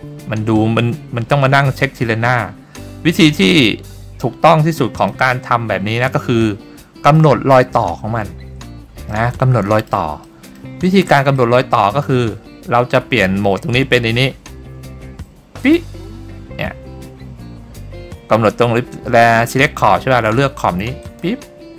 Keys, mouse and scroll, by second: 3.6-4.7 drag, 5.1 click, 5.8-6.4 scroll up 2, 6.9 shift+middle click, 9.2 middle click, 10.4 shift+middle click, 11.5 middle click, 15.7 click, 21.2 click.